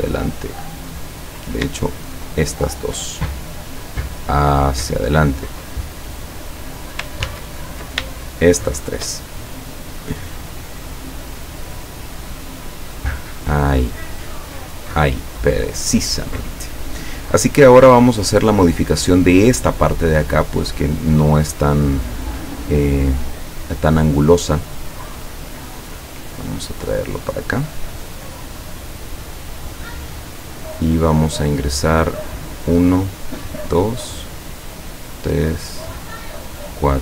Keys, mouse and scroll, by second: 0.9 click, 1.9 shift+click, 5.1 click, 5.6 click, 7.3 ctrl+z, 8.6 shift+click, 10.1 click, 10.4 click, 10.9 click, 11.3 click, 13.1 click, 17.9 click, 18.3 click, 21.7-24.1 drag, 25.0 click, 25.9-30.7 drag, 32.3 click, 33.3 click, 35.0 click, 36.6 click.